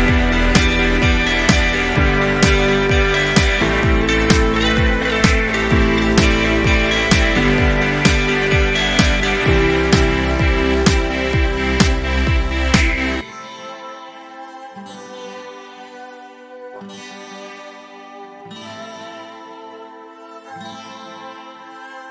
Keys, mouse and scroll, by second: 0.2-0.5 ctrl+scroll down 1, 0.5 space, 0.7-2.3 drag, 3.1-4.4 scroll down 2, 5.0-6.0 click, 6.2-6.9 ctrl+scroll up 1, 7.0-7.6 drag, 9.1 ctrl+scroll up 1, 10.5-11.7 drag, 12.7-13.2 drag.